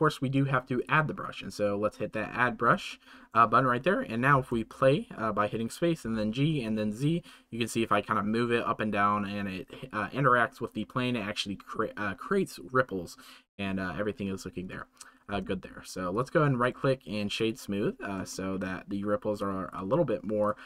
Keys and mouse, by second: 0.7 click, 3.0 shift+middle click, 14.6-16.7 middle drag, 16.7 click, 18.3 shift+middle drag, 19.3-19.7 drag, 20.4-20.6 right drag.